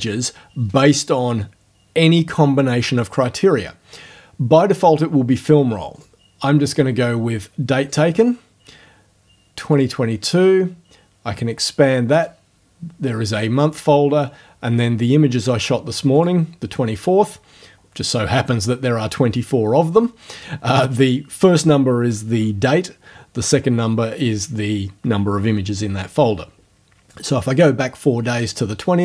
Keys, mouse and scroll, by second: 6.0 click, 7.9 click, 9.7 click, 12.2 click, 16.2 click, 28.4 click.